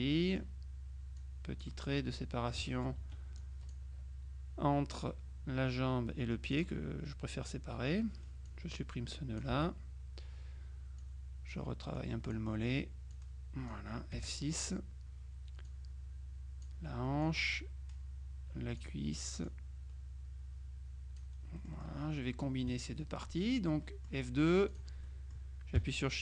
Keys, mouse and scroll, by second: 1.3 click, 3.1 F2, 3.5 click, 6.6 click, 8.5-10.0 drag, 10.0 Delete, 11.1 click, 13.2 click, 14.3 F6, 15.7-17.2 drag, 17.3-19.4 drag, 19.5-22.4 drag, 21.7 right click, 22.7 F2, 23.2 click, 24.8 click.